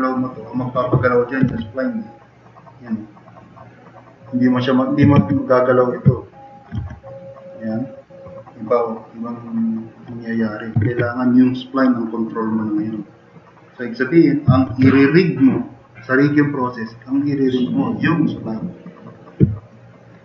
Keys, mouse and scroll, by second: 1.5 r, 5.2 ctrl+z, 6.8 e, 10.8 ctrl+z, 14.7 ctrl+z, 19.5-20.0 drag.